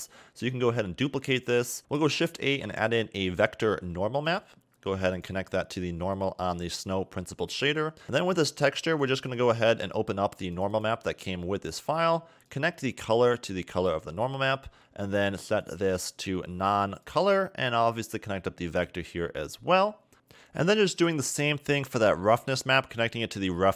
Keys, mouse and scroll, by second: 0.1 shift+d, 1.8 x, 2.6 shift+a, 6.3 click, 9.0 click, 9.4 click, 11.0 click, 12.6 click, 15.9 click, 19.2 click, 20.1 click, 21.1 click.